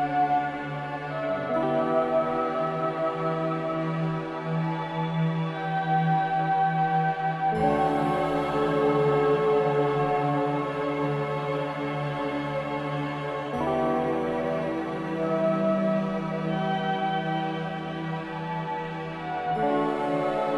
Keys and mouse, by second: 0.6-1.1 middle drag, 4.7 shift+click, 5.4 shift+click, 6.8 shift+click, 10.4 z, 12.1 middle click, 13.9-15.6 middle drag, 16.3 z, 20.1-20.5 middle drag.